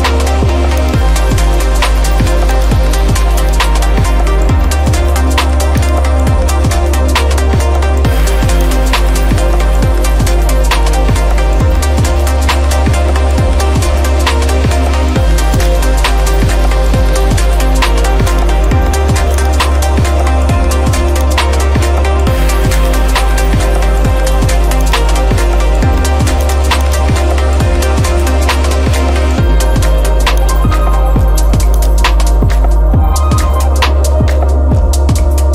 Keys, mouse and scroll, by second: 0.0 click, 0.8 click, 2.7 click, 3.5 click, 5.9 click, 8.7 click, 11.0-12.1 scroll, 12.2 scroll down 3, 13.1-13.4 scroll up 2, 13.6-14.6 scroll, 15.6 click, 16.3-16.8 scroll, 17.4 scroll, 19.4 click, 21.3 click, 22.8 click, 24.9 click, 26.6 click, 27.0 click, 27.5-28.7 typing, 30.5-32.6 drag, 32.6 scroll.